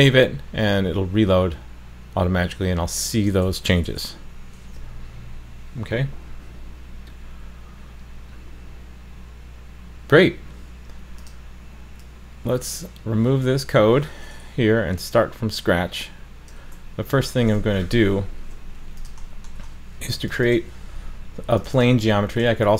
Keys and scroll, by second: 4.6 super+s.